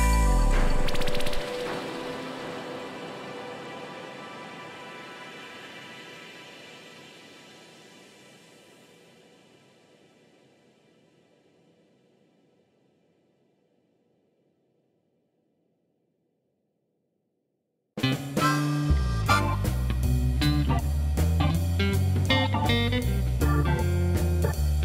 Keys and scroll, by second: 2.8 g, 3.6 n, 4.4 Return, 8.7 ctrl+j, 10.1 g, 10.2 shift+z, 11.3 g, 11.3 z, 12.9 g, 14.4 g, 14.6 shift+z, 19.4 g, 19.9 Escape, 23.8 shift+d, 24.0 shift+z.